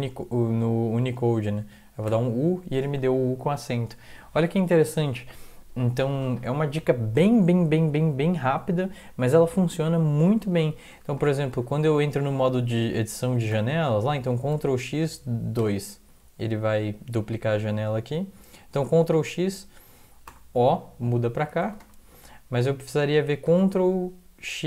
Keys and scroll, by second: 2.1 u, 10.9 BackSpace, 11.2 BackSpace, 11.5 BackSpace, 12.5 Down, 12.7 Down, 13.2 Up, 13.5 Return, 14.5 ctrl+x, 15.6 2, 19.1 ctrl+x, 20.3 o, 21.6 ctrl+x, 21.8 o, 23.5 ctrl+x.